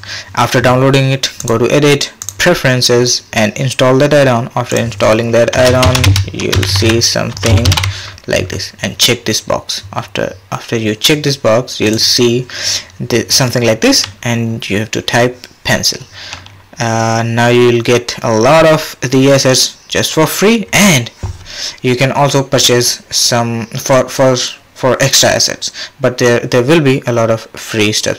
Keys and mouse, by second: 1.4 click.